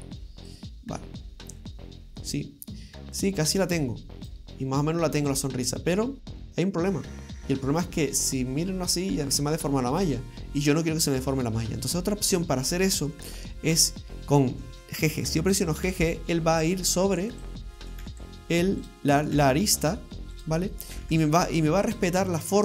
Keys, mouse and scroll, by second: 0.5 click, 2.3 right click, 3.3 click, 6.5 click, 8.3 middle click, 11.9-12.5 scroll up 2, 12.7 shift+middle click, 13.8 right click, 15.9 g, 17.8 right click, 18.1 g, 19.2 right click, 19.3 g, 20.8 right click, 21.0 g.